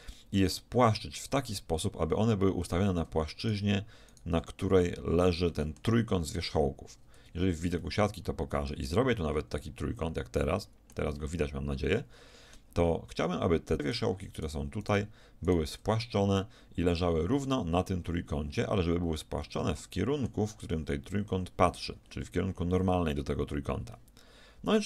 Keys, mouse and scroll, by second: 2.6-6.1 middle drag, 7.1 z, 9.0 f, 9.6 middle click, 9.8-12.9 middle drag, 13.8 right click, 16.4 right click, 19.4-21.7 middle drag, 23.9 middle click.